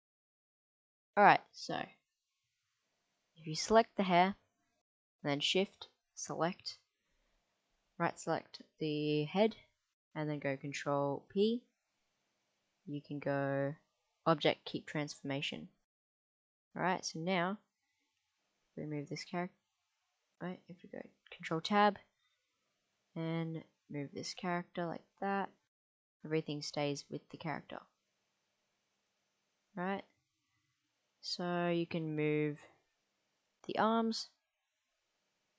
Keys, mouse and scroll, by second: 0.0 q, 1.8 click, 3.1 click, 11.2 ctrl+p, 16.5 middle click, 17.8 click, 18.6 g, 19.7 click, 20.9 ctrl+Tab, 22.6 click, 23.8 g, 30.3 ctrl+z, 32.4 middle click, 33.4 click, 34.1 r.